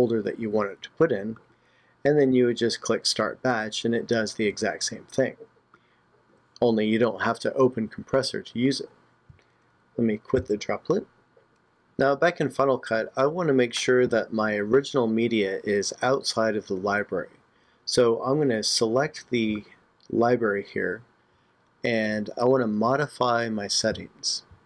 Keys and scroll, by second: 10.4 super+q.